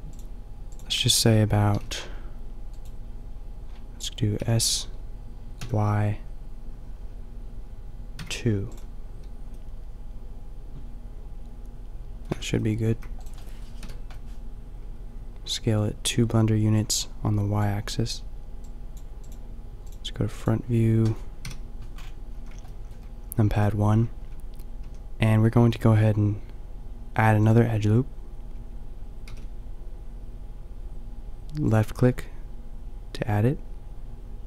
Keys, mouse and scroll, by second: 1.7 s, 2.8-6.8 drag, 4.4 s, 8.8-10.7 drag, 10.7 middle click, 11.2 middle click, 12.3 Tab, 12.9 a, 13.2-15.5 middle drag, 13.8 KP_5, 19.6 click, 21.4 KP_5, 22.3 a, 24.3 Tab, 24.8 a, 25.8 ctrl+r, 29.3 ctrl+r.